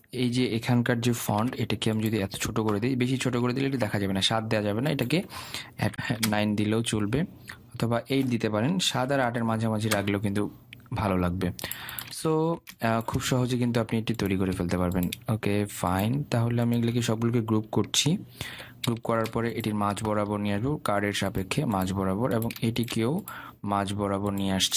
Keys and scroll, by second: 5.9 Return, 19.0 ctrl+g.